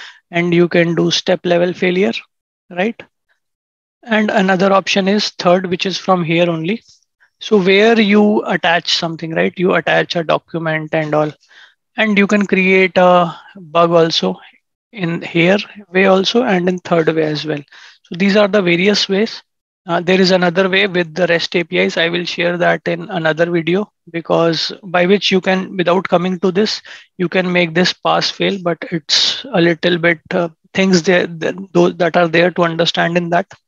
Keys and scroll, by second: 33.2 ctrl+shift+&.